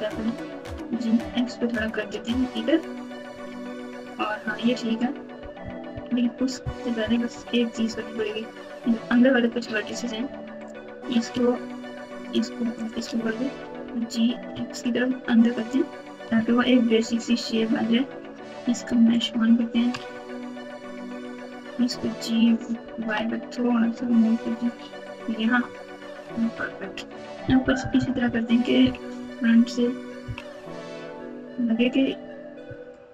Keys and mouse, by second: 0.1 g, 3.4 alt+z, 4.0 click, 5.6-7.2 typing, 10.5 click, 12.2 shift+click, 12.8 shift+click, 13.4 g, 16.3 Tab, 19.1 click, 19.9 Tab, 21.1 click, 21.9 g, 26.3 Tab, 27.6-29.1 typing, 30.2 KP_3, 30.5 KP_9, 32.6 s.